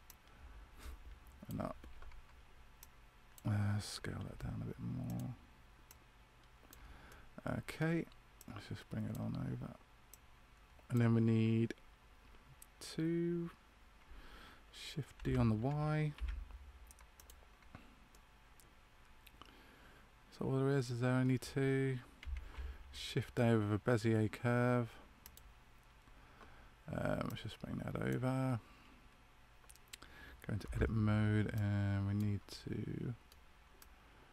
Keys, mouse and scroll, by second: 0.0 click, 4.2 s, 5.8 click, 7.0 middle click, 8.3 click, 15.1 shift+d, 18.0 middle click, 22.4 shift+a, 27.2 click, 31.5 right click, 32.4 middle click, 33.7 right click.